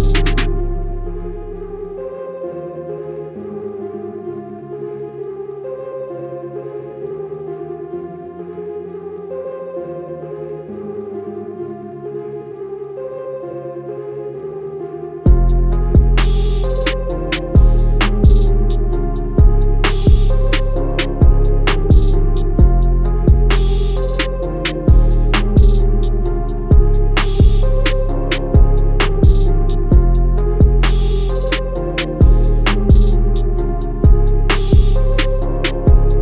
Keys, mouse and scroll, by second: 0.9 z, 1.1 click, 2.1 alt+scroll up 2, 2.4 click, 3.7 alt+scroll up 1, 3.9 scroll down 1, 4.2 click, 7.4 scroll down 1, 7.5 scroll up 1, 7.9 click, 9.7 click, 10.6 scroll up 1, 10.9 shift+click, 11.6 Escape, 11.8 click, 11.9 scroll up 1, 12.0 click, 12.2 Left, 12.4 Up, 12.6 Left, 12.7 click, 13.4 Right, 13.5 Up, 13.6 click, 13.9 alt+scroll down 1, 14.0-14.6 alt+scroll up 3, 14.6 click, 17.1 ctrl+z, 17.2 click, 17.4 ctrl+z, 17.6 ctrl+z, 17.8 click, 19.0 alt+scroll down 2, 19.2 scroll up 1, 19.6 click, 21.6 scroll up 1, 22.1 click, 22.3 alt+scroll down 1, 22.4 click, 22.6 click, 23.1-23.4 scroll down 3, 23.8 click, 24.2 click, 26.5 scroll down 1, 26.9 click, 26.9 scroll up 1, 27.1 click, 27.8 z, 28.0 click, 29.3 z, 29.5 click, 34.1 z, 34.2 click.